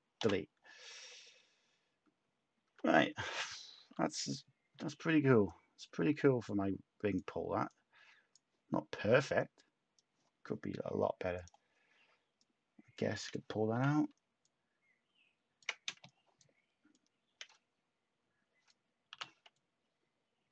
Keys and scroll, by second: 0.2 Delete, 0.9 Tab, 2.0 Tab, 2.6 Tab, 3.7 a, 13.7 h, 15.8 shift+a.